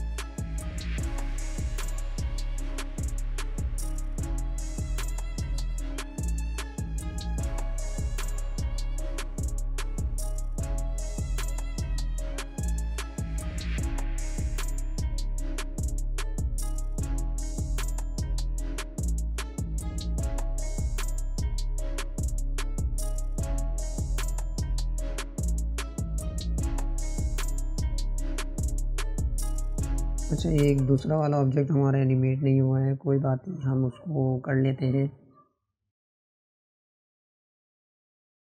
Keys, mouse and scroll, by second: 7.3 click, 8.8 click, 18.1-21.8 drag, 28.2 click, 30.5-37.6 drag.